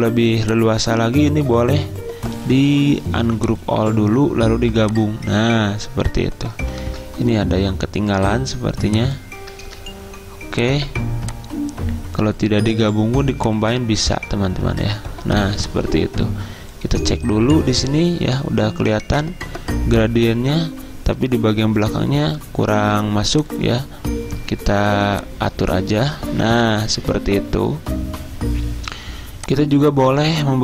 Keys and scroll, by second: 6.9 ctrl+z, 9.7 ctrl+z.